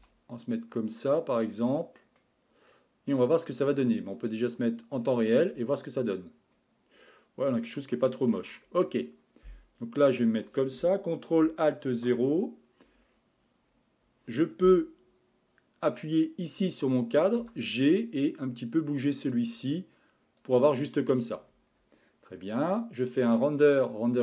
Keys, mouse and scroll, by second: 0.0 g, 2.2-5.3 middle drag, 5.3 click, 6.2 scroll up 3, 7.0-7.7 scroll up 4, 7.7-8.6 middle drag, 8.6 scroll down 2, 9.6-10.0 scroll down 1, 10.0-11.9 middle drag, 11.9 alt+KP_0, 13.0-14.3 scroll up 5, 16.1 click, 17.4 g, 23.2-24.2 drag.